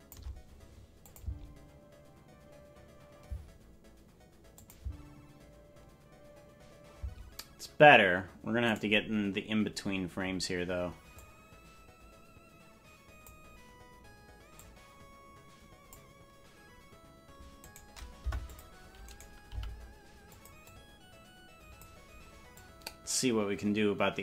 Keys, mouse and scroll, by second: 1.0-3.3 drag, 1.2 space, 3.2 space, 4.5 click, 4.7 space, 6.9 space, 8.7 right click, 11.1-13.3 drag, 14.5-15.9 drag, 17.5 right click, 18.1 Delete, 19.0 right click, 19.4 g, 20.6-21.8 drag, 22.5-24.2 drag.